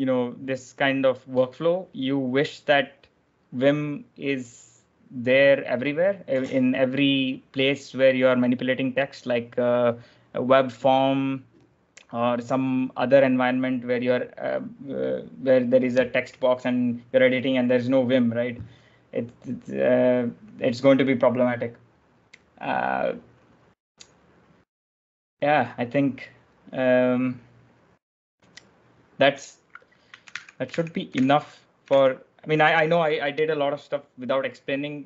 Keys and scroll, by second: 30.1 ctrl+j, 30.1 ctrl+l, 34.6 ctrl+l.